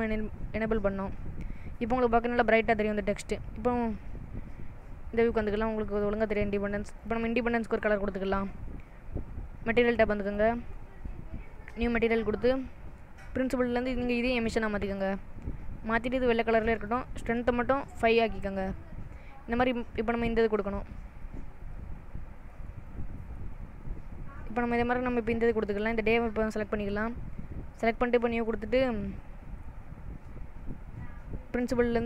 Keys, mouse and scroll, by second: 0.0 click, 1.1 middle click, 6.2 click, 6.5 middle click, 7.2 click, 7.6 middle click, 10.3 click, 12.0 click, 13.9 click, 16.9 click, 19.7 click.